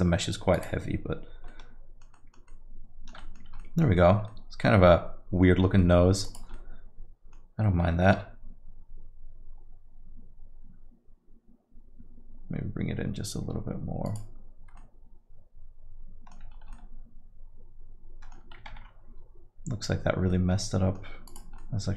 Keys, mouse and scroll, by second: 1.5 alt+middle click, 2.1 alt+middle click, 2.5 alt+middle click, 3.2 middle click, 3.4 scroll down 1, 3.6 alt+middle click, 3.9 middle click, 4.3 alt+middle click, 5.8 middle click, 6.2 click, 6.8 alt+middle click, 11.1 g, 14.8 alt+middle click, 16.5 scroll up 2, 16.7 alt+middle click, 19.8 ctrl+z, 20.3 alt+middle click, 21.8 click, 21.8 alt+middle click.